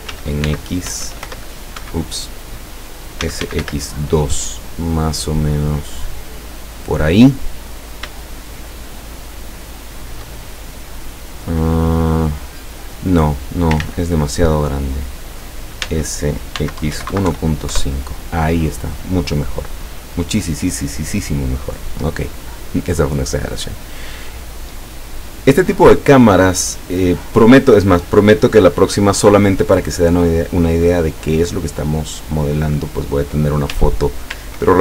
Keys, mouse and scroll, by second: 0.0-1.8 typing, 1.8 Escape, 3.0-4.2 typing, 4.7 click, 8.3-10.4 shift+middle drag, 10.5-13.8 shift+drag, 13.8 ctrl+middle click, 13.9 ctrl+z, 13.9 ctrl+click, 15.9-17.3 typing, 17.8 KP_Enter, 18.8-20.7 middle drag, 21.3 scroll up 2, 33.8 Tab.